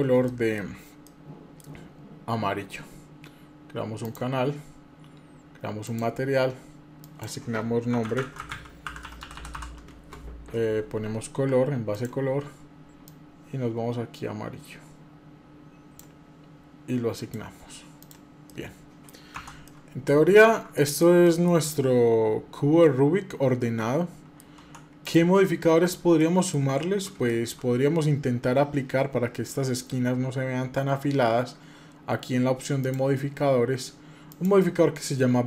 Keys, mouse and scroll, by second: 0.0 shift+middle click, 0.8 middle click, 3.8 click, 5.6 click, 6.8-10.6 drag, 11.7 click, 16.9 click, 17.8 click, 18.3 middle click, 19.2 Tab, 19.4 middle click, 20.5 middle click, 21.0 shift+middle click, 21.5-24.2 middle drag, 24.4 Tab, 24.8 click, 25.3 scroll up 1, 26.0 middle click, 27.1 shift+middle click, 27.5 scroll up 1, 28.7 scroll up 1, 29.1 scroll down 1, 32.6 click.